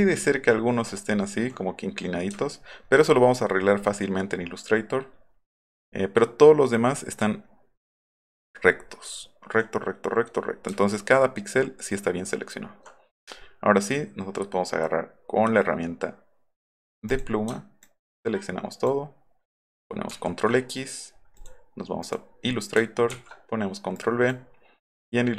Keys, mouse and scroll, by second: 2.3-3.4 alt+scroll down 9, 3.7-4.3 alt+scroll up 2, 4.5 alt+scroll down 1, 4.7 alt+scroll up 1, 5.5 alt+scroll down 1, 5.6 alt+scroll up 1, 9.0-9.4 alt+scroll up 4, 17.1 click, 17.8-18.9 ctrl+drag, 20.1 ctrl+z, 22.0 click, 23.1 ctrl+v, 24.0 click.